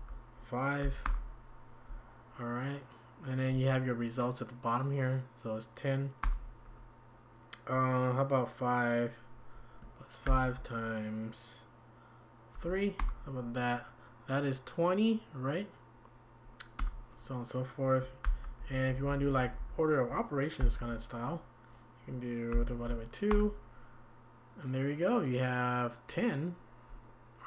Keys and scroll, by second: 0.8 typing, 1.0 Return, 6.2 Return, 10.2 *, 16.8 Return, 19.2-19.6 typing, 20.6-23.3 typing.